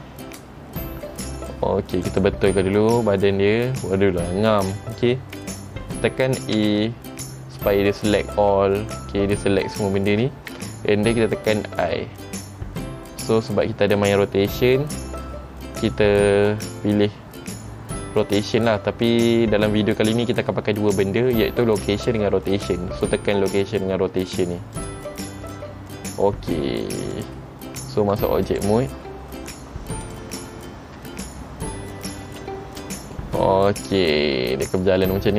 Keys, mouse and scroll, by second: 27.3 click, 30.2 click, 31.1-32.4 scroll down 1, 32.4-33.2 scroll down 3, 32.4 space, 33.3 middle click.